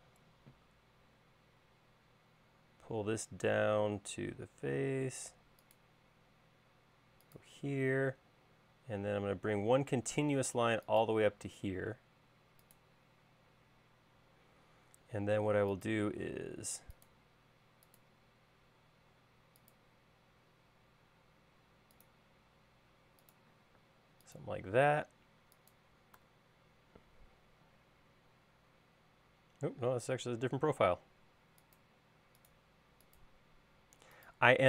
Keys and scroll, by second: 23.9 space, 30.0 typing.